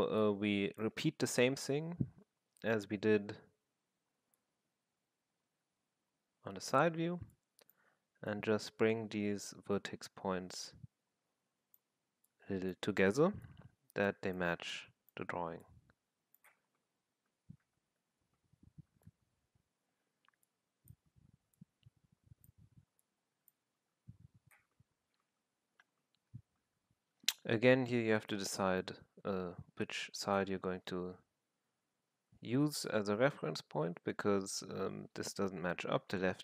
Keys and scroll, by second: 1.6 f, 17.8 z.